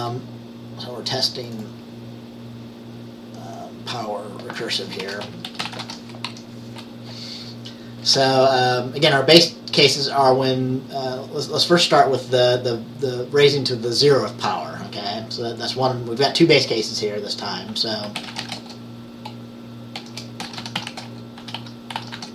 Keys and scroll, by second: 5.1-6.9 typing, 18.0-22.3 typing.